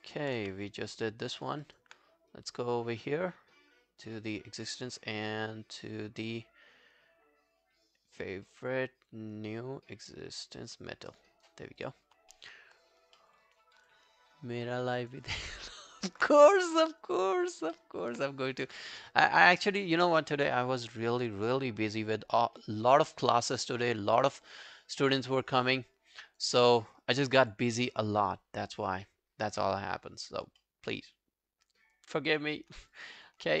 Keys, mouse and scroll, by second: 0.4 q, 1.4 alt+middle click, 1.7 alt+right click, 2.3 right click, 12.2 scroll down 2, 12.4 alt+middle click, 12.9 alt+scroll up 3, 13.2 alt+middle click, 13.5 alt+right click, 13.8 alt+click, 15.0 alt+right click, 15.3 alt+click, 15.6 alt+right click, 15.9 alt+click, 16.9 alt+middle click, 17.2 alt+right click, 17.5 alt+click, 17.8 alt+middle click, 18.6 right click, 27.8 scroll down 1, 29.1 scroll down 1, 29.1 scroll up 3, 30.6 middle click, 32.7 scroll down 2, 33.0 alt+click, 33.2 alt+right click.